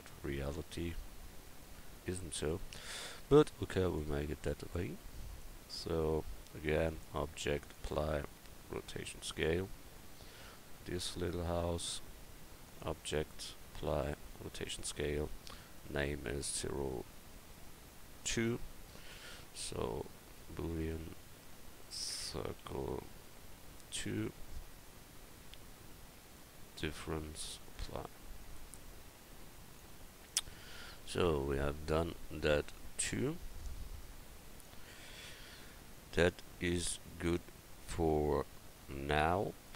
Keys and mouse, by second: 1.4 middle click, 10.3-12.0 right drag, 15.8-20.3 right drag, 19.6-25.6 drag, 26.2-31.4 drag, 28.6-31.8 right drag, 30.6-32.1 middle drag, 33.6-34.9 drag, 34.9-35.5 middle drag, 36.3-36.9 middle drag, 39.6-39.7 drag.